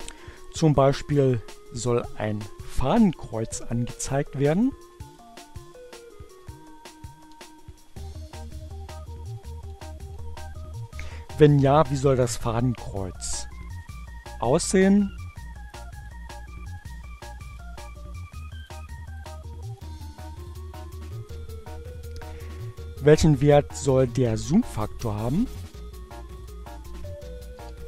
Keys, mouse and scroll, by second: 4.3 click, 5.9 ctrl+alt+w, 12.8 click, 14.9 click, 16.6 click, 17.8 click, 19.6 click, 20.2 click, 24.8 click, 25.4 click, 26.0 4.